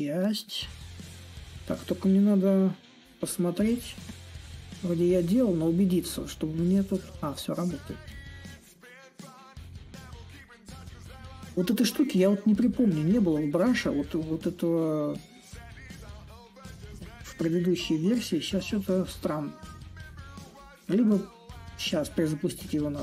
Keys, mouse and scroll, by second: 5.8-10.9 drag, 12.3-17.4 drag, 17.4-22.5 drag.